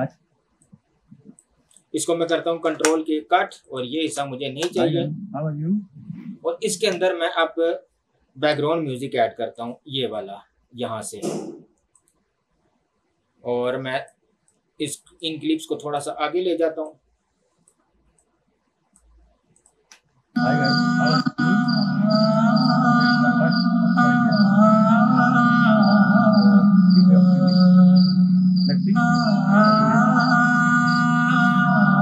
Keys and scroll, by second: 2.7 ctrl+k, 4.1 Delete, 7.0 space, 20.0 space.